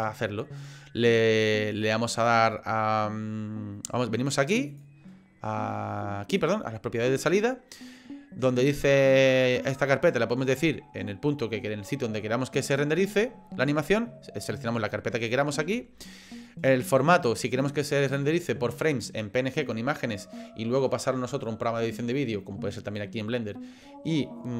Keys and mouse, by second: 1.1-2.3 drag, 4.7 click, 6.4 click.